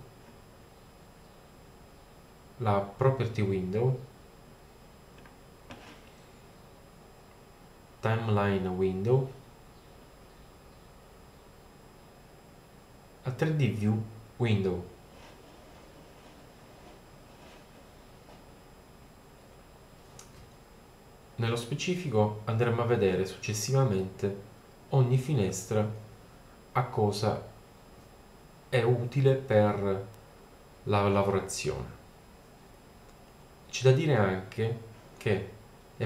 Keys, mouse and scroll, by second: 7.2-8.4 middle drag.